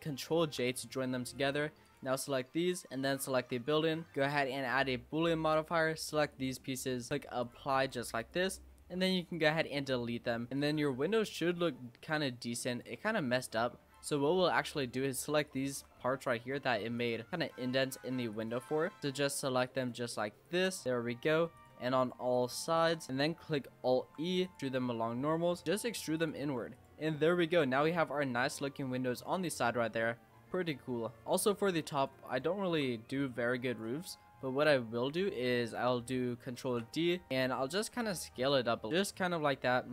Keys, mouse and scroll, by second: 0.4 ctrl+j, 1.4 click, 1.8 click, 3.0 shift+click, 4.8-5.7 drag, 7.1 click, 8.2 click, 9.0 x, 9.8-10.6 middle drag, 10.6 click, 10.9 Tab, 11.4 Tab, 12.0-12.7 middle drag, 12.7 click, 13.0 Tab, 13.2 scroll up 2, 13.5 middle click, 13.9 click, 14.7 shift+click, 15.1 shift+click, 15.5 shift+click, 16.0-17.0 middle drag, 17.0 shift+click, 17.7 shift+click, 18.3 shift+click, 18.8 middle click, 19.2 shift+click, 19.6 shift+click, 20.1 shift+click, 20.5 shift+click, 20.8 shift+click, 20.8 middle click, 21.5 shift+click, 22.0 shift+click, 22.4 shift+click, 22.7 shift+click, 23.0 middle click, 23.1 scroll up 1, 24.0 alt+e, 26.5 Tab, 26.8 click, 27.1 scroll down 4, 27.3-30.3 middle drag, 31.2-31.6 middle drag, 31.6 Tab, 32.0 click, 32.4 shift+middle click, 32.7-33.2 scroll down 1, 33.2 click, 34.0-34.4 scroll up 4, 34.4 middle click, 35.4-36.6 scroll down 2, 36.6 shift+d, 37.2 s, 38.2 middle click, 38.8 e, 39.3 s.